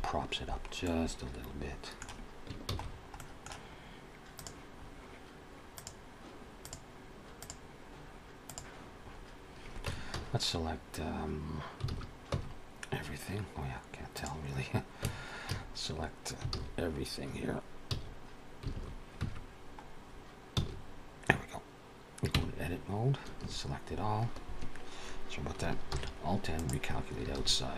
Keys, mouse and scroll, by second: 0.4 scroll down 2, 0.6 middle click, 2.5 ctrl+s, 2.7-3.1 scroll down 2, 3.0 middle click, 4.2 click, 4.6-5.5 scroll up 2, 5.6 click, 8.9-9.7 scroll up 1, 9.7 Tab, 9.7 scroll up 1, 9.9 a, 11.8 alt+a, 12.1 Tab, 12.9-14.0 scroll down 2, 14.0 click, 14.8 Tab, 15.3 a, 16.3 alt+a, 17.7 a, 18.6 alt+a, 19.0 Tab, 20.4 a, 22.2 Tab, 23.2 a.